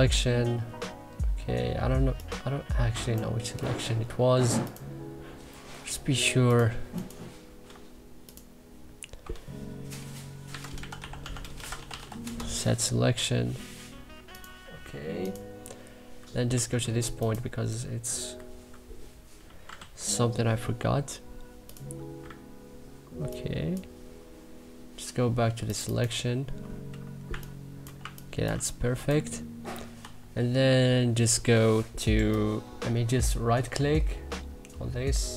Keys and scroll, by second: 3.7 Delete, 5.6 Delete, 10.2-12.4 typing, 16.4 w, 18.3 Delete, 19.3 x, 19.7 b, 27.2 3, 27.9 1, 28.4 3, 29.9 e.